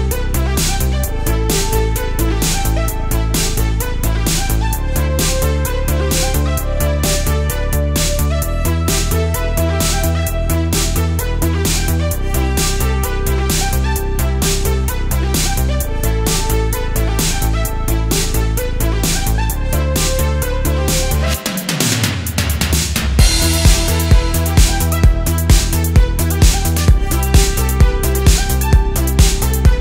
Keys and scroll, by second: 0.1 super+z, 1.1 super+z, 1.3 super+z, 3.8 space, 7.6 space, 10.1 space, 11.3 super+space, 12.8 space, 13.1 space, 13.6 super+space, 15.6 space, 16.2 super+space, 17.1 space, 17.5 space, 23.2 space, 23.5 space, 25.1-27.0 typing, 28.8 super+z.